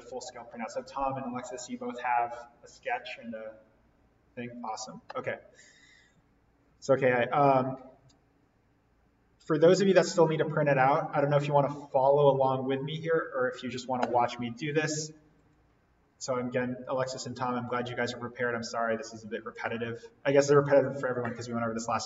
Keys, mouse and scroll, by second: 15.3 click.